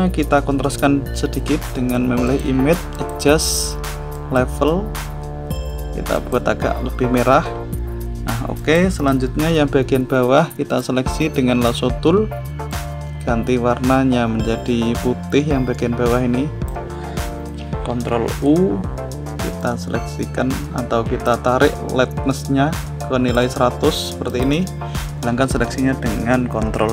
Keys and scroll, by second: 18.2 ctrl+u, 26.0 ctrl+d.